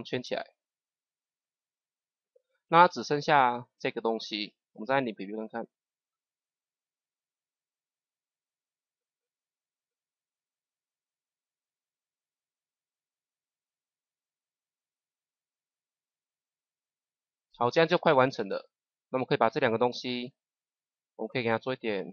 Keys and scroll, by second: 4.6 KP_0.